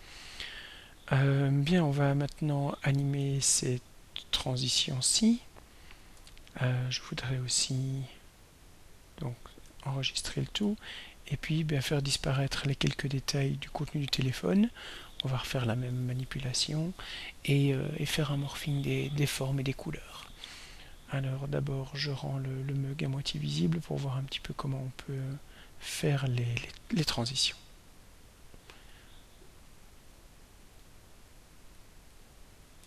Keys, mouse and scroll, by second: 1.8 click, 3.7 ctrl+scroll down 2, 5.6 ctrl+scroll down 2, 9.3 ctrl+s, 10.7 ctrl+scroll down 2, 11.7 ctrl+scroll down 2, 23.7 click, 30.1 click, 30.7 click, 31.3 click, 31.8 click, 32.2 click.